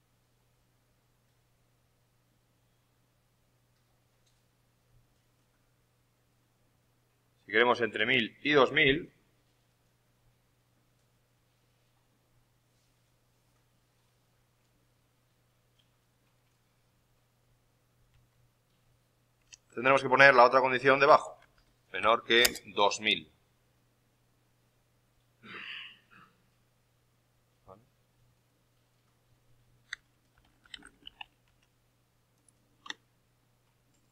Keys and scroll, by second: 18.0 alt+Tab, 19.4 alt+Tab, 30.3-31.6 typing.